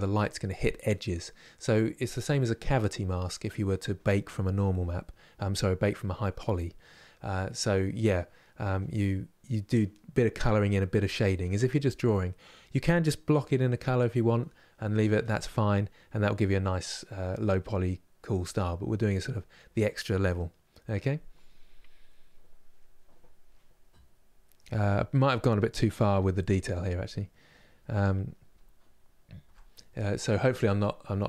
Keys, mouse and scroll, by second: 25.8-31.2 middle drag.